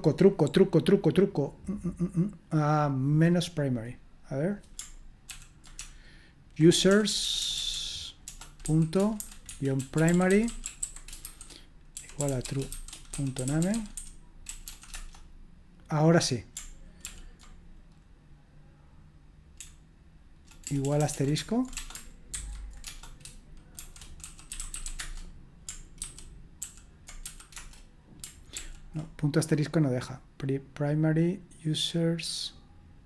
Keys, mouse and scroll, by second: 2.7-5.3 drag, 5.3 ctrl+p, 5.8-14.6 typing, 14.9 Return, 17.0 ctrl+p, 19.5-25.3 typing, 26.0 ctrl+c, 26.6 ctrl+p, 27.0-27.7 typing, 28.6 ctrl+p.